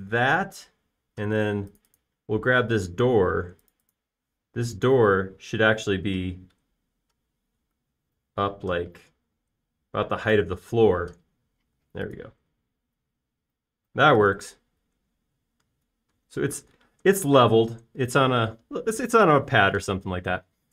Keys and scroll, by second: 0.9 space, 5.4 p, 8.9 shift+q, 11.7 space.